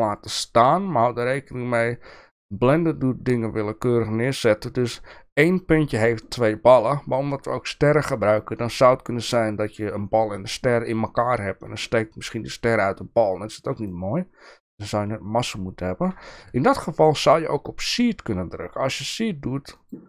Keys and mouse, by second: 14.1-16.1 shift+middle drag, 19.0 click, 19.8 click.